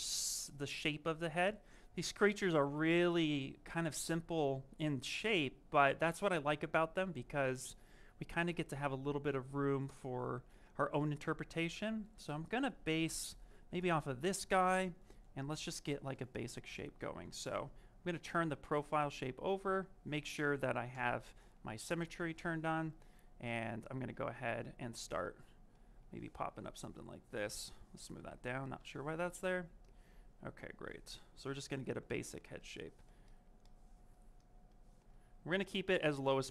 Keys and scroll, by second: 17.5 s.